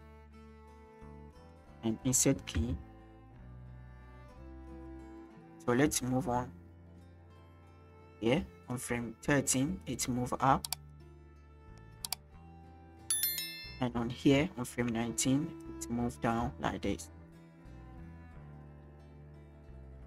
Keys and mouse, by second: 2.6 i, 5.5-8.8 drag, 9.8 click, 12.2-14.0 drag, 14.6 shift+middle drag, 15.6 click, 19.4-20.0 drag.